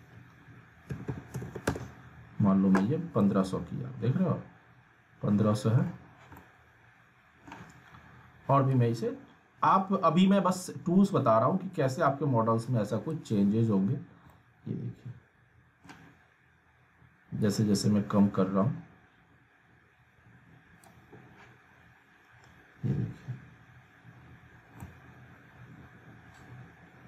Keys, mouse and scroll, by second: 3.1-6.0 alt+middle drag, 7.0-7.7 alt+middle drag, 9.0-13.3 drag, 13.5-14.2 scroll down 1, 14.3-15.9 alt+middle drag, 17.4-20.8 drag, 22.1 scroll up 1, 24.8 scroll up 1, 24.9-27.0 middle drag.